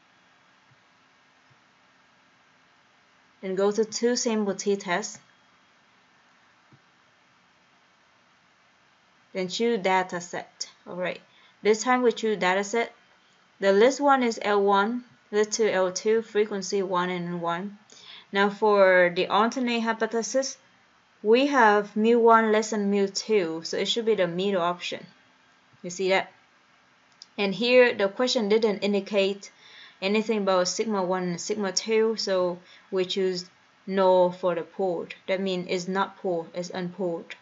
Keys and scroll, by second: 1.3 Right, 1.7 Right, 4.1 Down, 4.7 Down, 5.6 Down, 6.9 Return, 10.3 Left, 11.9 Return, 14.1 Down, 15.3 Down, 16.4 Down, 17.1 Down, 19.5 Down, 24.9 Right, 25.9 Return, 27.9 Down, 32.7 Return.